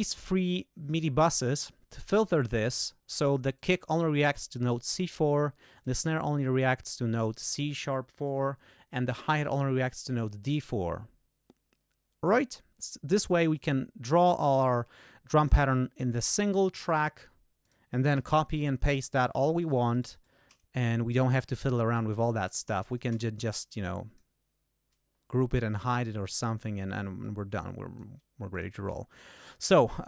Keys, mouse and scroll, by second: 3.5 click, 5.7 click, 9.0 click, 13.5 click, 17.5 click, 18.1 alt+d, 18.7 ctrl+alt+scroll down 3, 19.2 ctrl+alt+d, 19.5 ctrl+alt+click, 19.8 ctrl+alt+shift+right click, 22.3 shift+click, 22.8 shift+click, 23.7 click, 26.7-28.1 drag, 28.4 click.